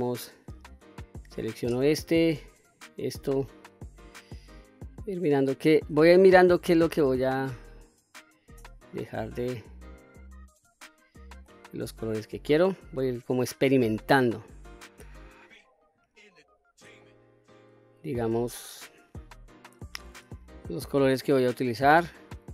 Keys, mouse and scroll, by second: 2.1 shift+click, 3.1 shift+click, 3.6 shift+click, 4.2 shift+click, 4.6 shift+click, 5.2 shift+click, 5.9-7.4 middle drag, 7.3 shift+click, 8.1 shift+click, 8.8 shift+click, 9.3 shift+click, 9.8 shift+click, 10.6-11.3 middle drag, 11.7 shift+click, 12.2 shift+click, 12.6 shift+click, 13.1 shift+click, 13.5 shift+click, 13.9 shift+click, 14.6 shift+click, 15.2 shift+click, 15.7 shift+click, 16.1 shift+click, 16.9-17.6 middle drag, 18.1-18.6 shift+middle drag, 19.0 shift+drag, 19.3 shift+click, 20.1-20.9 middle drag, 21.5 shift+click, 22.2 shift+click.